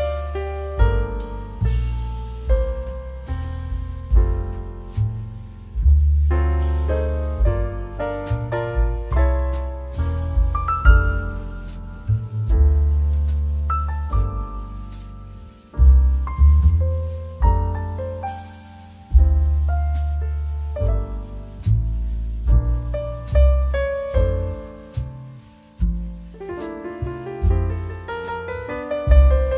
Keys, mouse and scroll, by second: 1.2 z, 1.6 click, 2.5 space, 2.9 click, 3.0 space, 3.7 click, 3.9 space, 4.1 click, 4.4 space, 5.6 click, 6.0 space, 7.8 ctrl+j, 8.8 ctrl+shift+a, 14.0-16.8 drag, 19.6-22.2 drag, 25.1-26.5 drag, 26.5 ctrl+z, 27.9 space, 28.0 click, 28.3 space, 28.8 space.